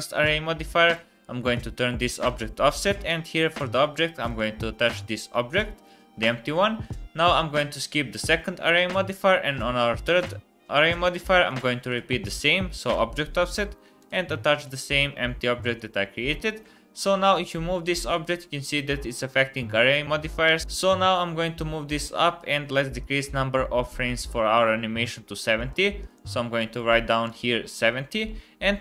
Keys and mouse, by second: 12.8 click, 13.9 click, 14.5-15.7 drag, 17.2 click, 18.4 g, 22.3 click, 22.7 click, 23.0-25.6 middle drag, 25.6 click, 27.3 middle click, 28.1 middle click.